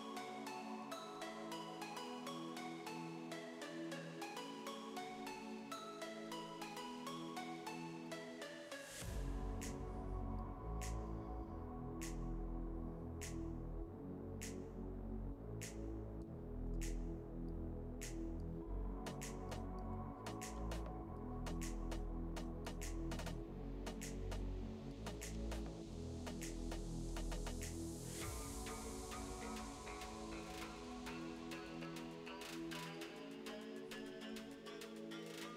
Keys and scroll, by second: 5.2 space, 7.8 space, 16.7 e, 19.9 v, 23.4 e.